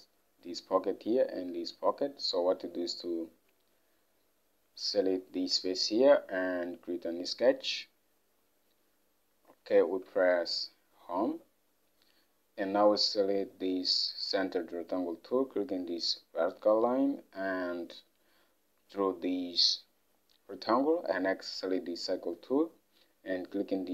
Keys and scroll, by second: 1.8 alt+Tab, 10.2 Home.